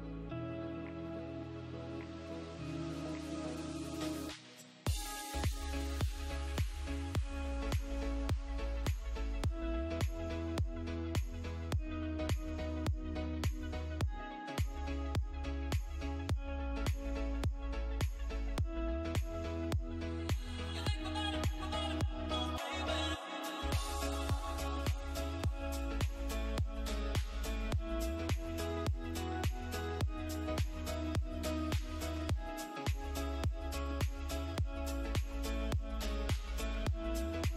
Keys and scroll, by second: 1.6 F3, 3.0 Escape, 6.8 Caps_Lock, 7.2-11.2 typing, 11.8 ctrl+space, 12.8 c, 13.0 e, 13.6 Escape, 15.6 F2, 19.0 F3, 20.7 c, 20.8 e, 21.2 F3, 21.3 Escape, 21.4 F2, 24.6 c, 25.1 Escape, 27.1 c, 27.1 e, 27.6 F3, 28.0 Escape, 28.5 F3, 28.8 Escape, 34.3 shift+F2, 35.3 F9.